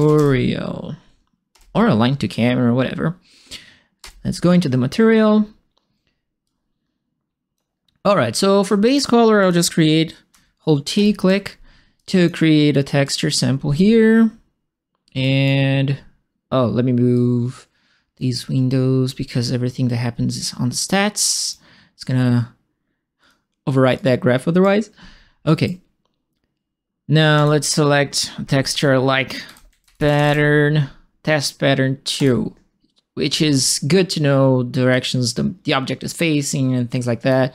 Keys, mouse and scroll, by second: 0.0-0.5 typing, 1.5 Return, 4.0 Return, 6.4-7.5 drag, 8.6 right click, 9.4 click, 10.3 t, 10.9 click, 11.9 click, 13.0 click, 15.2 right click, 17.1-18.1 drag, 19.2-21.5 drag, 23.2 click, 23.9 right click, 25.4 right click, 27.3 click, 29.2-30.6 typing, 32.1 click, 34.9-37.2 drag.